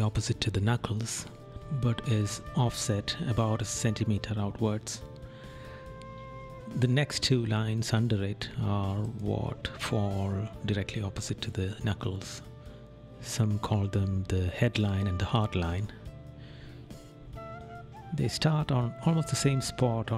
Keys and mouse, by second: 0.5 right click, 2.5 right click, 3.4 right click, 4.4 right click, 5.0 right click, 7.3 right click, 10.8 right click, 15.2 right click, 15.9 right click, 16.9 right click, 18.4 right click.